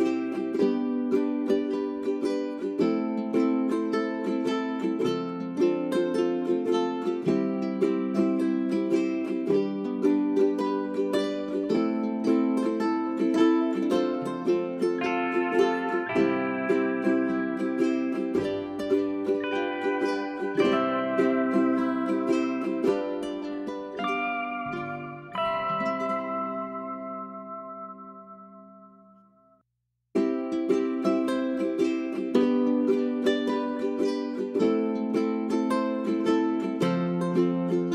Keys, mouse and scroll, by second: 0.6 click, 0.7-1.2 scroll down 1, 1.2 middle click, 1.7-2.0 scroll up 1, 2.1 ctrl+click, 4.7 click, 6.5 scroll down 1, 6.7 click, 7.6-7.9 scroll up 1, 8.0 ctrl+click, 8.3 click, 10.1 scroll down 1, 10.4 middle click, 15.5-16.8 typing, 17.7-18.3 scroll up 1, 18.3 middle click, 18.5-19.0 scroll up 1, 19.0 click, 19.7 space, 20.2 click, 20.7 right click, 21.6 click, 22.1 Delete, 22.4 click, 22.5 right click, 23.1-25.7 drag, 25.9 End, 26.1-27.2 typing, 28.3-37.9 drag.